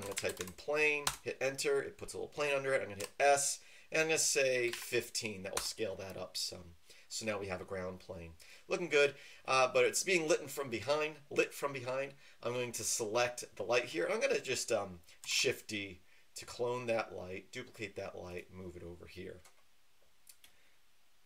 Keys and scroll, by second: 0.0-0.4 typing, 1.0 Return, 3.0 typing, 4.6 typing, 5.5 Return, 15.3 typing.